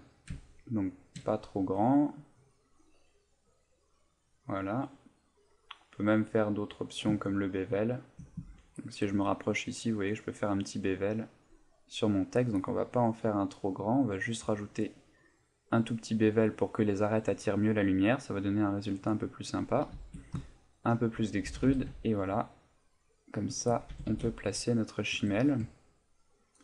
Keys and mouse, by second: 1.6 click, 3.1-7.4 click, 7.4 ctrl+middle click, 8.5 ctrl+middle click, 8.7 shift+middle click, 10.0 click, 10.1 click, 10.4 click, 10.5-17.7 click, 18.7 click, 19.0 click, 20.5 ctrl+middle click, 21.4 g, 23.5 shift+click, 23.9 g, 25.1 shift+click, 25.4 middle click, 25.8 ctrl+middle click.